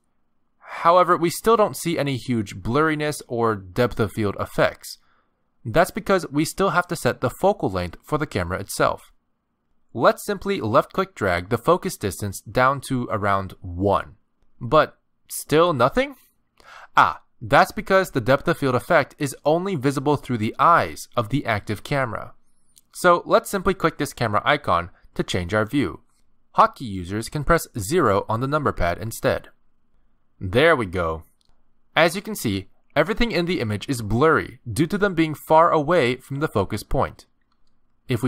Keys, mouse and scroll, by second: 1.5 middle click, 3.0 middle click, 9.4 click, 10.5-11.1 scroll down 6, 12.0 click, 16.0 middle click, 24.5 click, 27.9 KP_0, 28.7 KP_0.